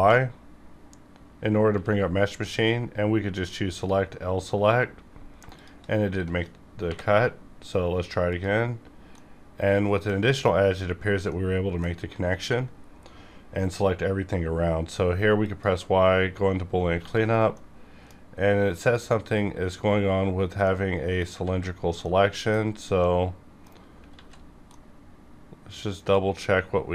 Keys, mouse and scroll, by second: 0.4-1.3 scroll down 1, 1.6 y, 3.6 click, 3.8 click, 4.4 scroll down 1, 4.8 scroll up 1, 5.5 shift+click, 6.8 y, 8.2 click, 8.9 scroll down 1, 9.1 middle click, 9.1 middle click, 10.2 scroll up 1, 10.8 scroll down 1, 11.2 middle click, 11.3 middle click, 11.9 scroll up 1, 12.7 scroll down 1, 13.2 y, 15.4 click, 16.9 1, 17.2 scroll down 1, 17.5 middle click, 17.6 middle click, 18.1 scroll up 1, 20.1 scroll down 1, 20.6 middle click, 21.4 alt+z, 21.7 scroll down 1, 22.0 middle click, 22.9 middle click, 24.1 alt+z, 24.3-24.6 alt+scroll up 3, 24.6-26.2 middle drag.